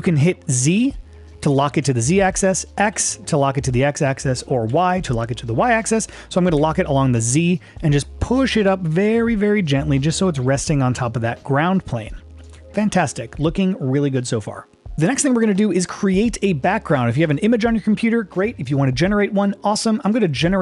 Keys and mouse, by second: 0.7 z, 3.2 x, 4.7 y, 6.6 z, 12.4 shift+click, 13.3-14.4 middle drag, 14.9-17.3 middle drag.